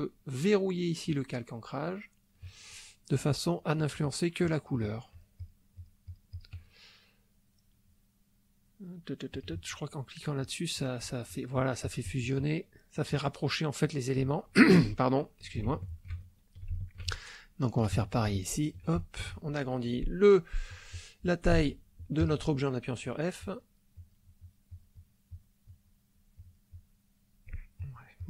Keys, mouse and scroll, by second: 1.1 click, 3.0 click, 3.4 click, 4.4 click, 4.8 click, 5.8 click, 9.3 click, 10.4 click, 15.0 ctrl+middle click, 15.8 ctrl+shift+middle click, 15.8 ctrl+shift+click, 16.2 ctrl+shift+middle click, 16.2 ctrl+shift+click, 17.3-19.0 ctrl+shift+middle drag, 21.5 f, 22.2 click, 23.0 click, 23.5 click, 23.9 click, 24.4-25.6 drag, 26.3-27.7 drag, 27.8 click.